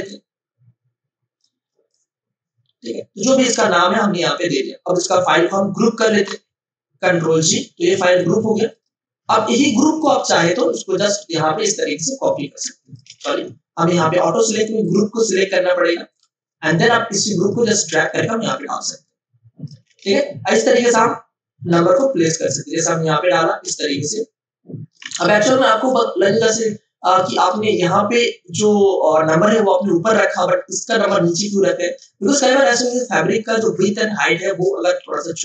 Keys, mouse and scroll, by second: 0.0-3.3 shift+drag, 3.3 Return, 5.9 shift+click, 7.1 ctrl+g, 8.1 click, 9.4 space, 9.6 click, 9.9 space, 10.4 ctrl+alt+click, 11.4 v, 12.2 alt+click, 13.2 ctrl+alt+z, 14.8 click, 20.0 space, 20.1 click, 20.5 space, 21.9-25.0 drag, 25.0 space, 25.3 ctrl+alt+click, 30.2 space, 30.3 click, 30.7 space, 32.5 click, 32.5 space.